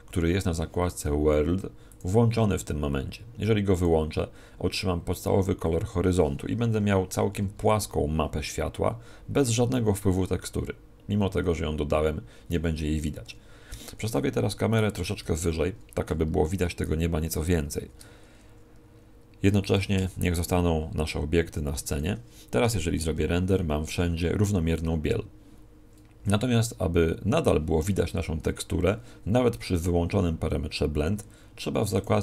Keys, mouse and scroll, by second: 13.7 Escape, 14.7 right click, 15.2 KP_0, 17.8 shift+f, 19.7 click, 20.0 g.